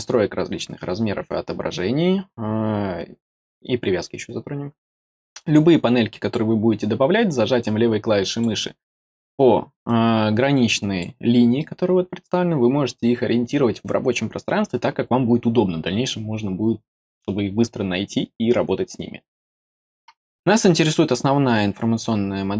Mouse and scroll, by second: 5.3-8.4 drag, 9.8 click.